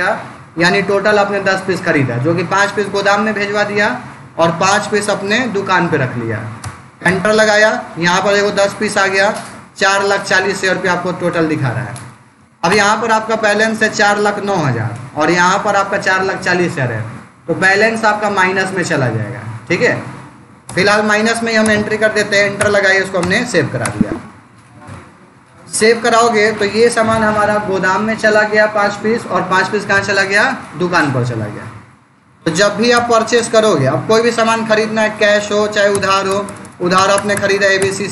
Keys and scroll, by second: 6.5 Return, 20.5 Return, 32.8 Return, 35.8 Return.